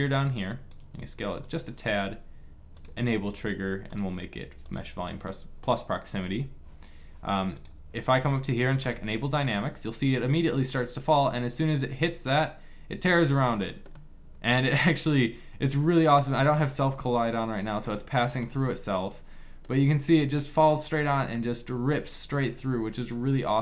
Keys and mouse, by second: 0.6 s, 3.8-6.0 drag, 7.5 click, 8.5 middle click, 9.0-10.4 drag, 12.0-13.5 middle drag, 18.8-20.9 middle drag, 22.8 click.